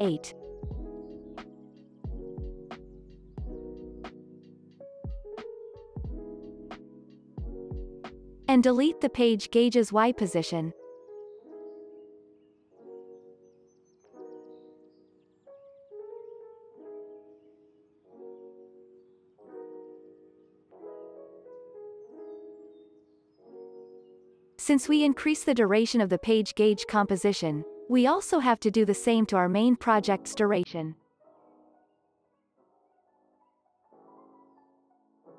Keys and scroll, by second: 7.7 ctrl+s, 24.5 ctrl+s.